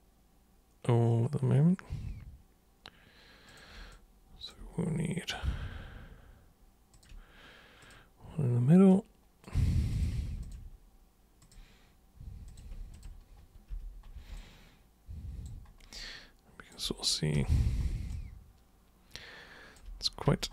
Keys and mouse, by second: 3.5 super+click, 3.9 alt+super+click, 6.9 ctrl+super+click, 7.8 super+click, 8.9 super+right click, 10.0 super+click, 10.4 ctrl+shift+super+click, 11.4 super+click, 12.5 super+click, 12.9 ctrl+shift+super+click, 13.7 super+g, 14.4-15.5 alt+super+drag, 16.0 alt+super+click, 17.3 super+3, 18.2-19.8 alt+super+drag, 20.3 super+1.